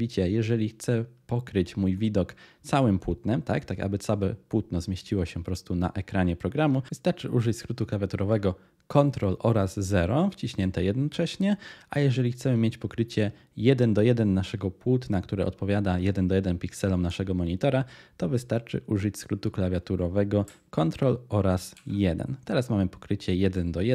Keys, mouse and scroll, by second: 6.9 ctrl+0, 21.8 ctrl+1.